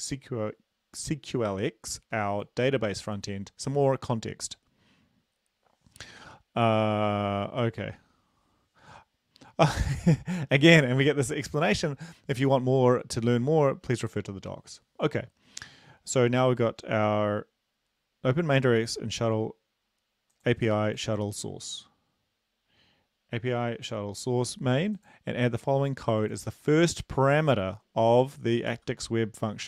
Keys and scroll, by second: 28.7 ctrl+c.